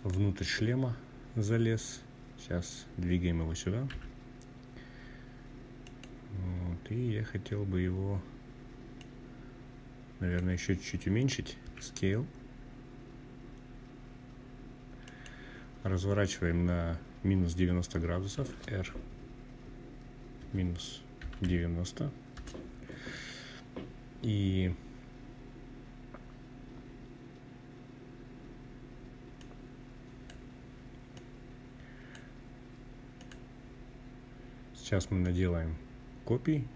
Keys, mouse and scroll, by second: 1.7-2.6 scroll down 2, 2.6 g, 4.5 click, 5.3-6.0 scroll up 1, 6.0-7.5 scroll up 2, 7.7-9.2 drag, 10.3 s, 13.7 click, 17.1 r, 19.1 -, 20.0 9, 20.1 0, 21.1 Return, 28.1-29.3 drag, 29.8-31.0 drag, 32.0 click, 33.9-35.9 drag.